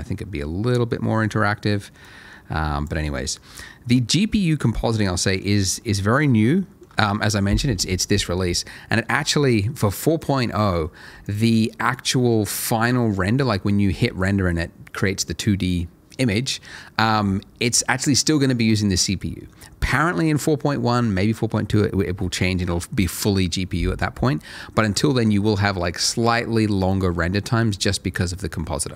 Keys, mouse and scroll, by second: 0.1 scroll up 1, 0.4 middle click, 0.7 scroll up 1, 1.0-2.0 scroll down 1, 2.0 click, 3.4-3.9 scroll down 1, 4.4-4.9 scroll up 1, 5.0 middle click, 6.5 shift+middle click, 8.7 middle click, 9.1 scroll down 1, 9.4 middle click, 11.2 ctrl+shift+l, 24.5 middle click.